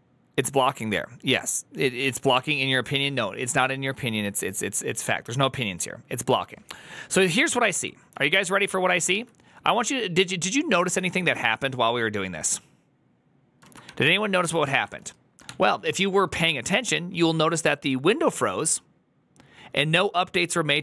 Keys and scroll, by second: 8.6-9.5 typing, 10.6-11.3 typing, 13.5 ctrl+a, 13.7-15.2 typing, 15.3 ctrl+h.